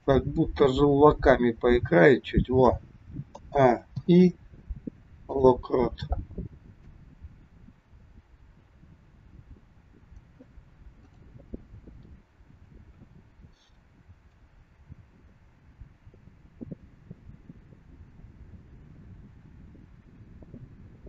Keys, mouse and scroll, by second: 0.1 click, 1.2 g, 3.4 a, 4.1 i, 6.9 click, 11.2 click, 11.8-12.9 scroll down 4, 12.9 KP_1, 14.4 click.